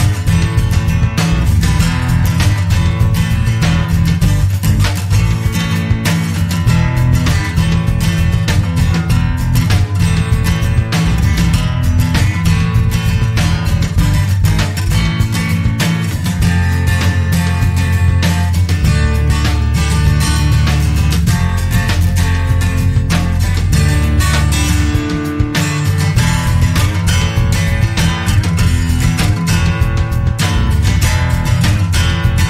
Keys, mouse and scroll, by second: 0.7-1.6 typing, 3.2 click, 5.5-5.8 scroll down 2, 6.2-6.5 scroll up 2, 7.5 click, 10.3-11.0 scroll up 2, 11.4-11.8 scroll down 1, 12.3 click, 12.7 click, 13.2-13.5 scroll down 2, 15.3 click, 18.0 click, 20.6 click, 21.4-21.7 scroll down 1, 21.9-22.3 scroll up 2, 22.7 click, 24.9-25.3 scroll down 2, 25.5 scroll up 2, 26.7 click, 28.3 click.